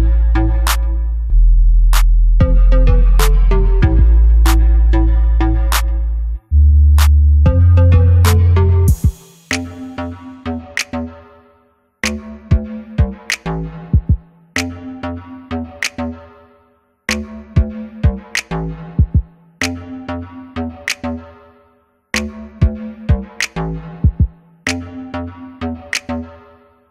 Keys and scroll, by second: 0.2 ctrl+KP_0, 11.0 |, 13.8 b, 15.0 b, 17.5 [, 17.6 [, 17.8 [, 26.1 ctrl+alt+KP_0.